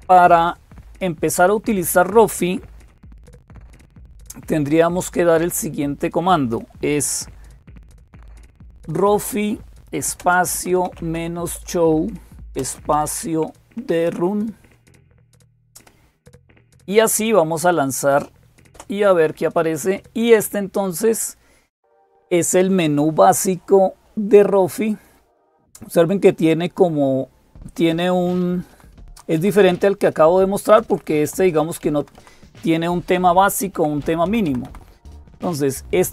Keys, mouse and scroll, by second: 0.0-36.1 typing, 18.6 Return, 28.5 Down, 28.8 Down, 28.9 Down, 29.2 Up, 29.4 Up, 29.6 Up, 30.5 Down, 30.7 Down, 30.9 Down, 31.1 Down, 33.6 Down, 35.3 Down, 35.3 Up.